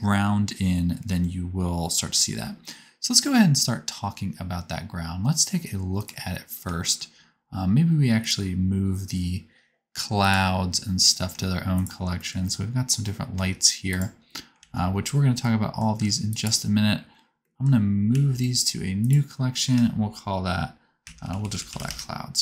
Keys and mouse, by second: 2.2 space, 8.1 click, 10.2 click, 11.7 shift+click, 12.3-14.3 middle drag, 14.6 alt+z, 15.9 c, 18.0 m.